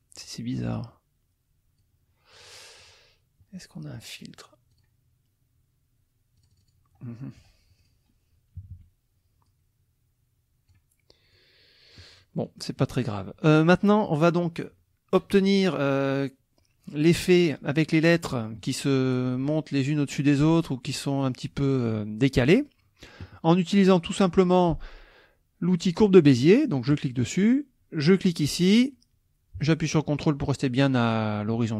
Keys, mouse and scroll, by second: 0.6-2.0 drag, 2.3 click, 3.9 click, 4.7 click, 6.4 click, 7.1 middle click, 7.8 click, 8.6 KP_Subtract, 9.5-10.9 drag, 11.3 click, 12.4 click, 17.1-18.8 drag, 20.9 click, 26.9 click, 28.0 click.